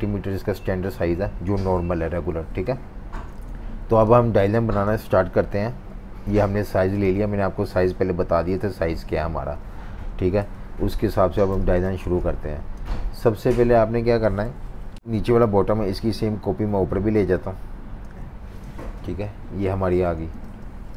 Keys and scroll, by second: 1.9 super+-, 2.1 super+-, 2.3 super+-, 3.2 typing, 4.4 v, 10.2 F19, 10.4 typing, 11.4-13.2 typing, 14.5 super+-, 20.1 super+-, 20.3 super+-.